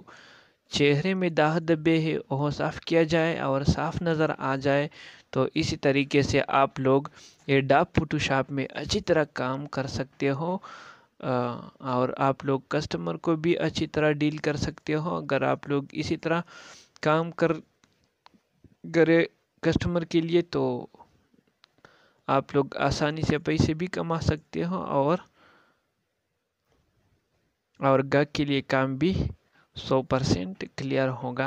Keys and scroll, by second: 17.5 ctrl+space, 18.9 ctrl+z, 26.3 alt+space, 29.4 ctrl+space.